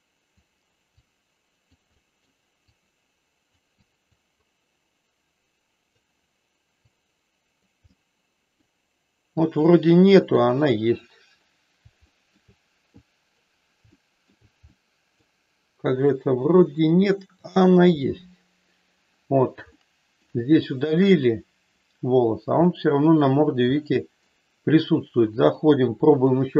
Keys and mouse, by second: 1.0 click, 2.0 middle click, 2.7 click, 3.8 click, 4.4-5.9 drag, 6.8 click, 7.9 middle click, 9.4-10.4 drag, 10.7 click, 12.0 shift+middle click, 13.0 click, 13.9 shift+middle click, 14.7 middle click, 16.8 click, 19.8 shift+middle click, 22.7 middle click, 23.8 middle click, 25.3-26.3 drag.